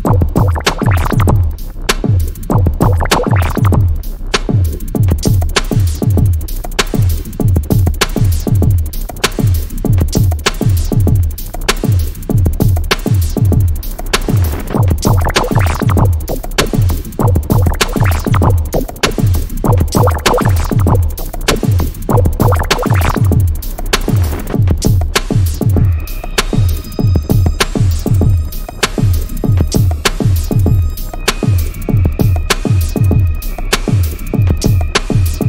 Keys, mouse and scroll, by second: 6.6 p, 8.0 click, 10.1 p, 11.4 click, 12.8 alt+click, 14.6-15.0 scroll down 1, 15.0 p, 15.5 click, 16.6 p, 17.7-28.4 drag, 28.7 scroll down 1, 28.8 scroll up 1, 29.6 click, 30.5 alt+click, 31.7 p, 32.2 scroll down 1, 32.3-32.7 scroll up 1, 32.9-33.4 scroll down 1, 33.4 click, 34.6-35.1 scroll down 1, 35.1 click.